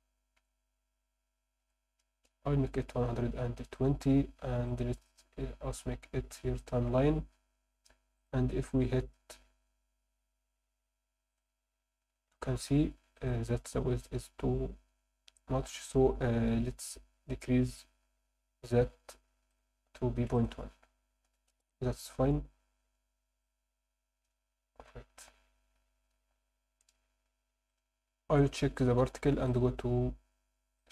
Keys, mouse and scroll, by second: 3.7 click, 6.7 click, 8.2 click, 11.4 click, 12.7 Escape, 13.2 click, 14.9-15.7 scroll down 4, 19.5 click, 20.3-21.6 drag, 23.4 click, 25.6 Escape, 26.6 ctrl+s, 28.4 click, 29.5-30.9 ctrl+drag.